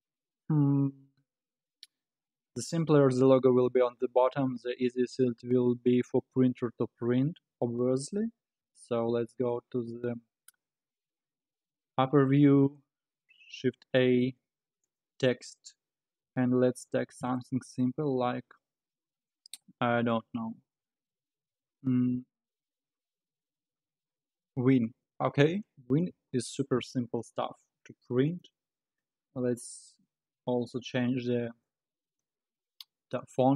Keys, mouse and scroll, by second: 8.6 KP_7, 13.6 shift+a, 16.0-16.4 scroll up 2, 16.4 Tab, 17.3 BackSpace, 17.6 BackSpace, 17.8 BackSpace, 18.0 BackSpace, 24.5 shift+w, 24.7 shift+i, 24.9 shift+n, 28.3-29.9 drag.